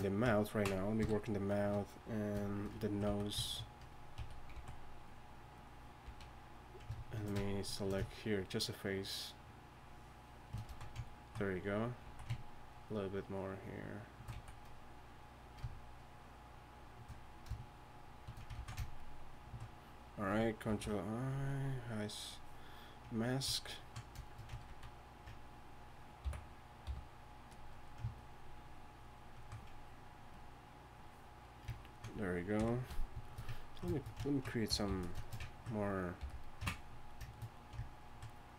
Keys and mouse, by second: 1.0 KP_3, 3.1 z, 4.2 a, 4.5 z, 6.1 z, 10.7 z, 12.0 z, 14.3 z, 18.8 ctrl+z, 20.7 ctrl+i, 24.9 ctrl+z, 26.2 m, 26.8 f, 29.4-29.9 drag, 30.3-31.8 drag, 30.3 f, 32.6 KP_1, 34.7 g, 34.9 f, 36.2 f, 38.4-38.5 drag.